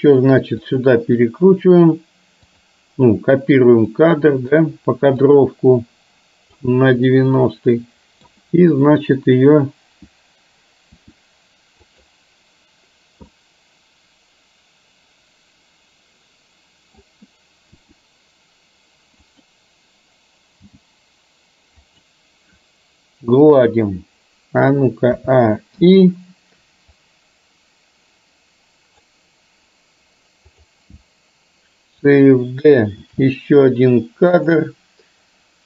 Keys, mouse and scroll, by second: 2.6 click, 3.9-4.7 middle drag, 5.3 click, 7.2-8.3 middle drag, 11.1 r, 13.4-17.1 middle drag, 17.8 r, 20.7 g, 25.2 a, 25.8 i, 27.1-29.1 drag, 30.6 click, 33.1 shift+d.